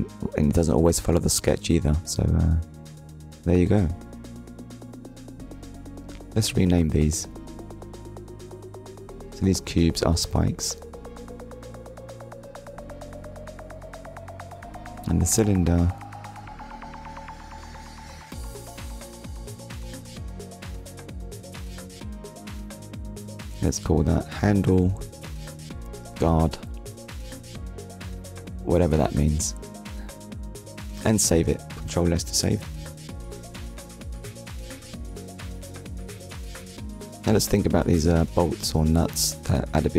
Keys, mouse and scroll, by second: 1.1 KP_1, 4.2 click, 5.4 click, 6.5 scroll up 1, 8.1 click, 11.6 shift+s, 11.9 p, 13.3 Return, 15.5-16.0 scroll down 1, 16.4-16.8 scroll up 1, 18.0 click, 19.1 click, 20.6 click, 21.5 click, 23.0 shift+h, 23.2 a, 24.7 shift+g, 25.1 u, 25.6 d, 25.9 Return, 28.7 click, 29.8 ctrl+s, 30.8 scroll down 1, 33.8 shift+middle click, 35.0 click.